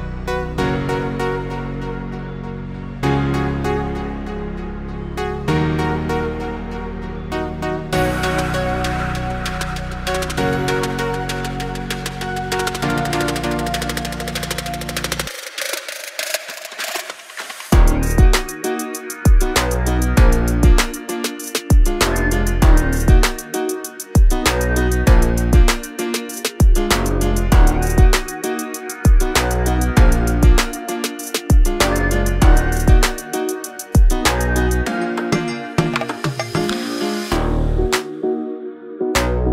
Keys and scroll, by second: 0.0-2.1 typing, 1.8 Return, 2.2 Escape, 5.0 r, 6.5 space, 7.9 m, 8.3 Up, 9.2 2, 9.5 Return, 10.2 space, 11.4 m, 11.7 space, 11.9 p, 13.0 3, 13.3 Return, 13.6 space, 13.8 Escape, 16.9 p, 18.4 space, 18.5 Escape, 22.2 r, 24.9 space, 25.2 p, 27.7 space, 28.0 l, 29.6 space, 30.8 m, 31.2 Up, 31.8-34.4 typing, 32.2 Return, 38.1 r.